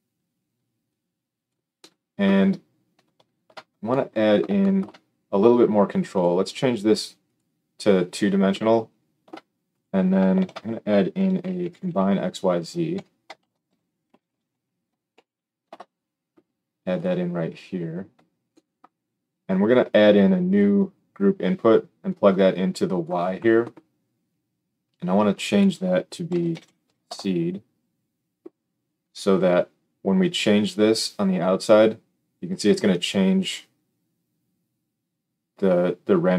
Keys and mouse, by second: 9.9-20.7 shift+middle drag, 10.3 shift+a, 13.3 shift+a, 20.7-25.3 drag, 25.3 middle click, 25.5-36.3 drag, 26.6 e.